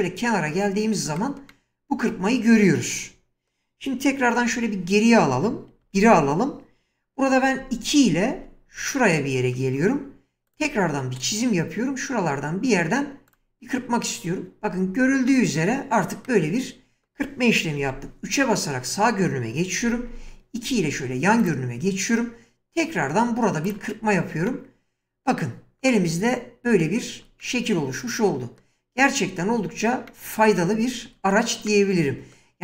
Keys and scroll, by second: 4.5 ctrl+z, 5.9 1, 7.9-8.4 typing, 17.9 typing, 19.8-20.5 typing.